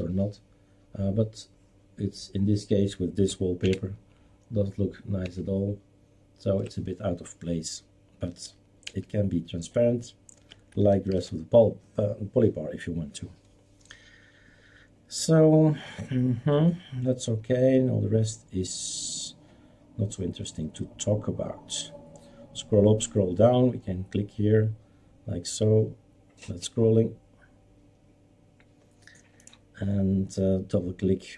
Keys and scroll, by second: 3.6 alt+Right, 5.2 alt+Right, 8.9 ctrl+z, 11.1 ctrl+s.